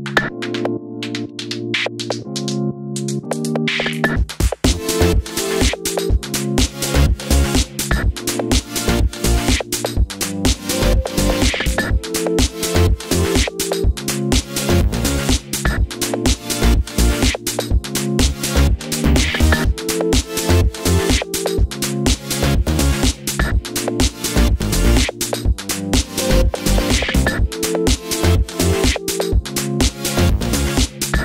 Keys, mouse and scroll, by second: 1.2 g, 1.7 click, 7.6 click, 7.8 r, 9.3 click, 10.2-12.7 middle drag, 11.4 alt+d, 12.7 click, 13.4 click, 13.5 g, 14.3 click, 14.5 click, 14.8 g, 15.8 click, 16.2 click, 16.6 g, 17.6 click, 17.8 click, 18.1 click, 18.8 alt+d, 19.3 click, 19.7 r, 20.5 click, 20.6 g, 21.4 click, 22.0 scroll down 1, 22.2 middle click, 23.1 click, 24.1 alt+d, 25.2-26.1 middle drag, 25.8 scroll up 1, 26.1-26.6 scroll down 2, 26.6 s, 27.1 click, 27.7 g, 28.9 click, 29.2 alt+d, 29.7 click, 30.0 r, 30.6 click, 30.7 g.